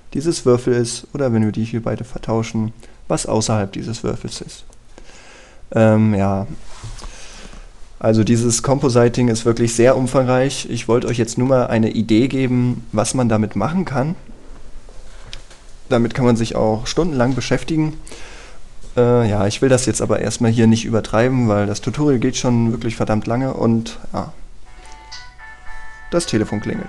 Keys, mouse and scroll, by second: 1.1-2.9 drag, 3.7-5.8 scroll down 1, 11.3-12.1 scroll up 1, 12.1 middle click.